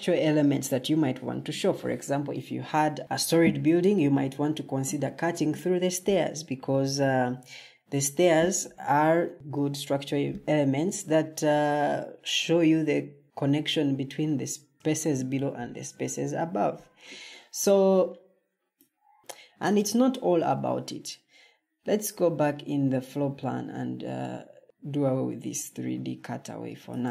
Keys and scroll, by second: 22.4 Escape.